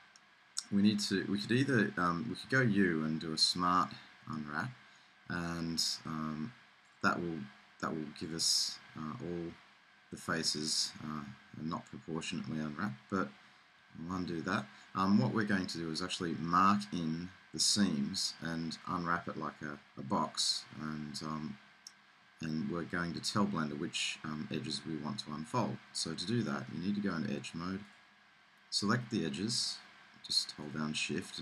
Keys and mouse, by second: 2.4 u, 14.1 super+z, 25.7 middle click, 26.3 middle click, 28.8-30.5 middle drag, 30.6-31.4 middle drag.